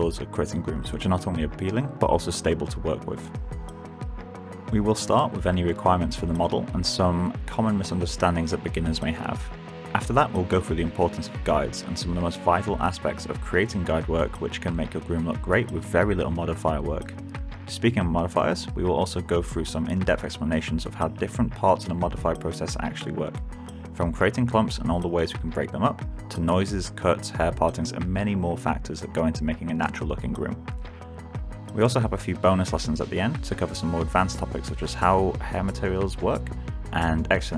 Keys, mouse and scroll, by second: 2.3 alt+click, 6.2 middle click, 6.5 alt+right click, 6.7 w, 6.8 click, 11.5 alt+middle click, 11.8 alt+click, 27.2 click, 33.1 1, 33.2 Return, 34.7 alt+right click, 35.2 alt+click, 35.8-36.8 typing.